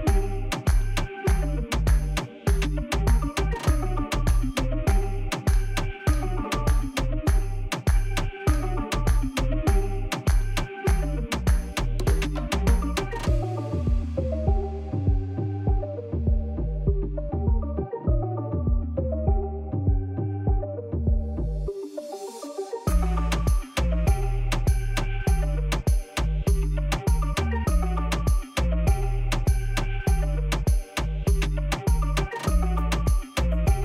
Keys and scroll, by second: 2.7 shift+z, 6.3 2, 9.4 ctrl+b, 15.5 Tab, 25.2 Tab, 26.8 3, 27.9 shift+s, 28.9 Tab, 29.3 shift+a, 31.6 Tab, 32.8 s.